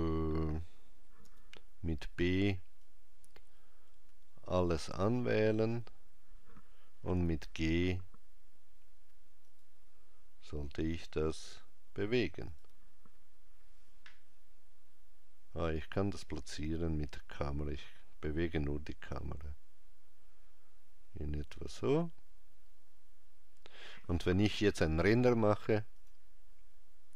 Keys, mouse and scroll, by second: 26.0 click.